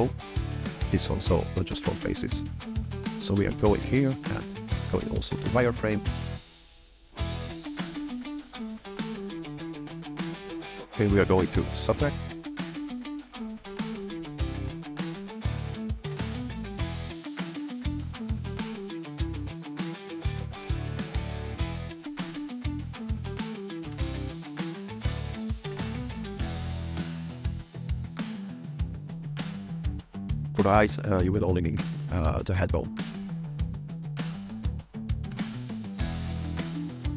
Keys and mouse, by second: 0.2 click, 4.0 click, 4.5 f, 4.7 click, 7.6 click, 7.7 click, 7.9 click, 8.1 click, 8.3 alt+click, 9.0 shift+middle click, 10.5 click, 11.9 click, 13.0 middle click, 13.2 click, 14.5 click, 14.6 click, 15.6 click, 15.7 click, 15.8 click, 15.9 click, 16.1 click, 16.4 f, 16.4 click, 17.0 click, 17.6 click, 17.9 click, 18.2 click, 18.9 click, 19.0 click, 19.2 click, 19.2 click, 19.8 click, 20.8 click, 21.1 click, 21.4 click, 21.6 alt+click, 21.8 f, 22.2 click, 22.8 click, 23.0 click, 23.0 click, 23.2 click, 23.2 click, 23.3 click, 23.4 click, 23.5 click, 23.7 click, 24.0 f, 24.4 click, 24.5 click, 24.6 click, 25.3 click, 25.4 click, 25.5 click, 25.8 click, 26.0 click, 26.2 click, 26.4 click, 26.6 click, 27.5 click, 28.1 drag, 28.8 f, 29.0 click, 29.3 click, 30.3 click, 31.6 alt+click, 32.6 click, 33.0 click, 33.5 alt+click, 33.8 click, 34.4 click, 34.6 click, 34.9 click, 35.4 click, 35.8 click, 36.0 click, 36.7 click.